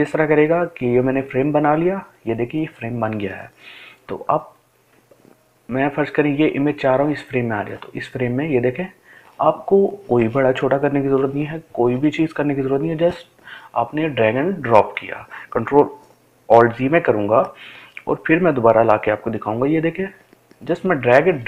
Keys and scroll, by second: 11.8 ctrl+z.